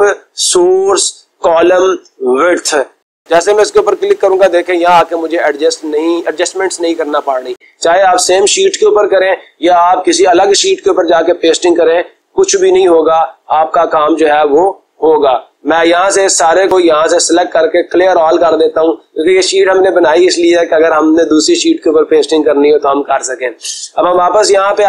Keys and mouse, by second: 3.4-4.5 drag, 5.0 click, 7.0 click, 7.7 click, 17.5 click, 18.8-19.8 drag, 20.3-21.4 drag, 21.6-22.7 drag, 23.6-24.7 drag.